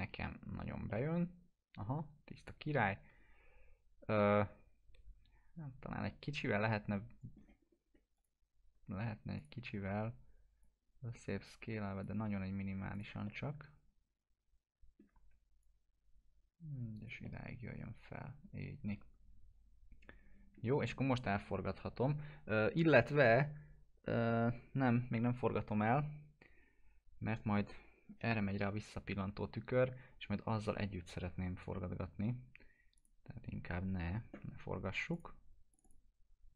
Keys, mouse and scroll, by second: 0.9-7.5 alt+middle drag, 7.7 scroll up 1, 8.2 click, 9.5-10.3 typing, 10.6-12.2 drag, 13.3-15.1 alt+middle drag, 15.2 w, 15.7-17.2 drag, 17.3-20.7 alt+middle drag, 20.8 middle click, 33.0 click.